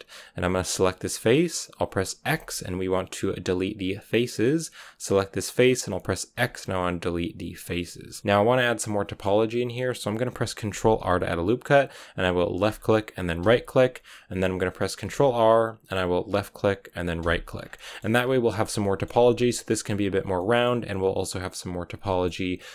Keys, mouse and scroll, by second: 0.7-4.4 right drag, 4.4 x, 5.4-7.6 right drag, 7.6 x, 7.9 scroll down 2, 8.0-10.7 middle drag, 10.7 ctrl+r, 15.0 ctrl+r, 17.5 scroll down 3, 17.7-22.7 middle drag.